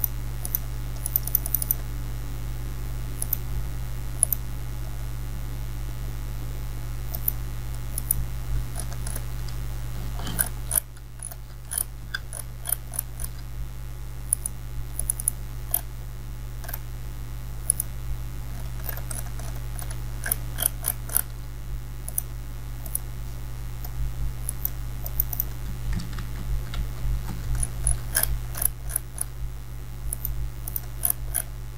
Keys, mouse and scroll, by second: 7.1 click, 8.8 alt+scroll down 1, 10.4 ctrl+scroll up 1, 11.2 alt+scroll down 1, 11.7 scroll up 1, 12.3 alt+scroll up 1, 12.6 alt+scroll down 1, 12.7 alt+scroll up 1, 14.3 click, 14.4 click, 15.8-16.4 scroll up 1, 18.6 alt+scroll down 1, 20.2 alt+scroll up 1, 20.4 alt+scroll down 1, 20.6 scroll up 2, 22.1 click, 22.1 click, 27.6 alt+scroll down 1, 28.1-28.7 scroll up 2, 29.2 alt+scroll up 1, 30.1 click.